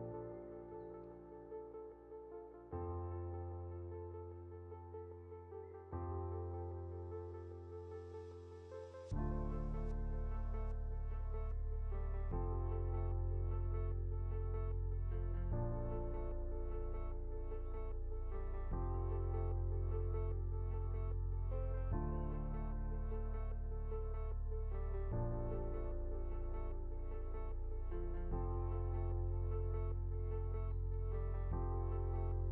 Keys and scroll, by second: 26.2 ctrl+0, 28.2 ctrl+g.